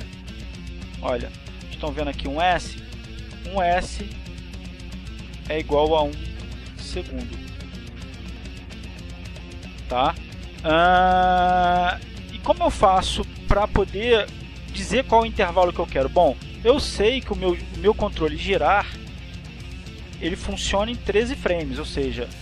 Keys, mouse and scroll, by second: 3.9 click, 4.9-6.1 drag, 6.9-8.8 drag, 8.9 click, 9.6 click, 10.3-13.8 drag, 15.6 click, 16.1 click, 20.9 click.